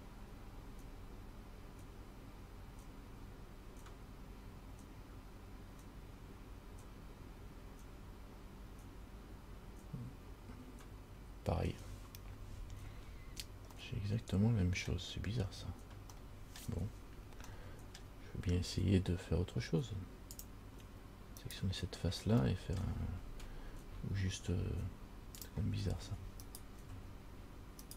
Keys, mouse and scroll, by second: 14.0 middle click, 15.7-16.3 scroll down 2, 16.5 middle click, 17.7 shift+middle click, 20.6 click, 21.7 right click, 22.7 middle click, 24.5 scroll up 1, 25.7 click, 26.7 alt+right click.